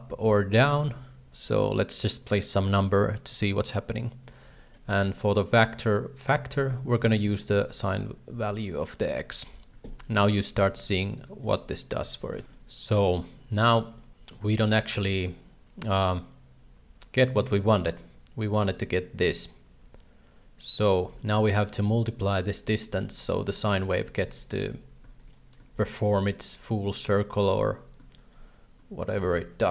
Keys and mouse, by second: 2.2-4.3 shift+drag, 4.6 shift+middle click, 7.5 ctrl+c, 8.3 ctrl+v, 9.3 shift+middle drag, 9.9 shift+middle click, 11.4 shift+middle click, 12.0 g, 12.4 shift+middle click, 13.1 shift+middle click, 13.8 shift+middle click, 18.1-19.7 drag, 20.3-21.3 drag, 21.6 click, 22.4 click, 22.9 shift+middle click, 23.5 shift+middle click, 24.2 shift+middle click, 25.2 shift+middle click, 25.7 shift+middle click, 28.2 shift+middle click, 29.2 shift+a.